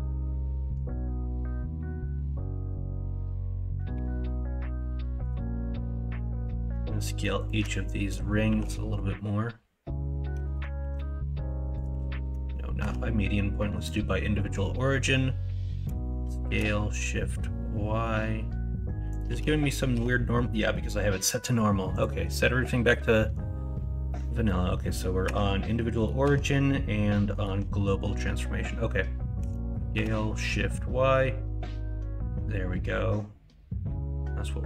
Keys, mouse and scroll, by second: 8.4 shift+y, 10.3 s, 11.9 ctrl+z, 12.7 ., 15.8 s, 19.2 ctrl+z, 29.3 s.